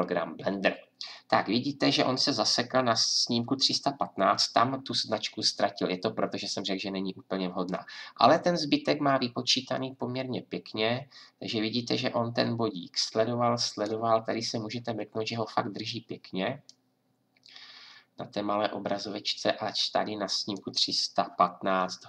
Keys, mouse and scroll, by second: 16.6-19.3 drag.